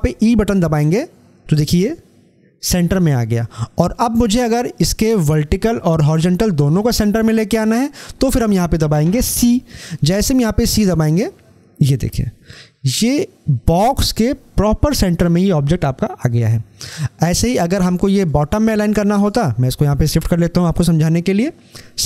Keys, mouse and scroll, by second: 10.6 e, 17.2-21.6 drag.